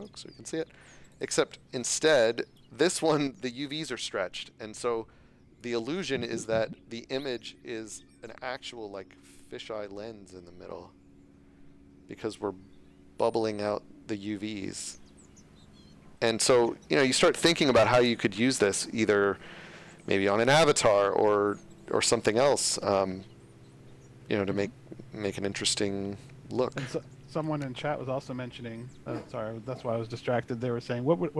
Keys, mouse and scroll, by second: 8.2 click, 8.9-9.7 scroll down 1, 21.5-21.9 scroll up 1, 25.9 w, 27.6-27.9 scroll, 28.7-29.1 scroll up 1.